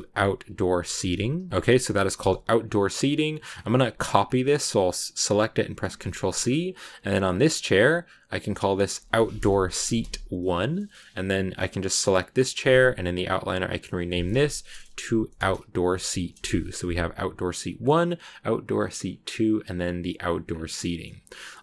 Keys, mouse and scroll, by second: 1.5 o, 2.4 click, 2.5-5.7 drag, 7.1 right click, 8.3 click, 8.4-9.4 drag, 9.4 BackSpace, 9.6 BackSpace, 12.2 right click, 13.5 click, 13.7-14.8 drag, 14.8 BackSpace, 17.7 click, 18.8 click, 20.1 click, 20.3 scroll down 2, 20.7-21.6 middle drag.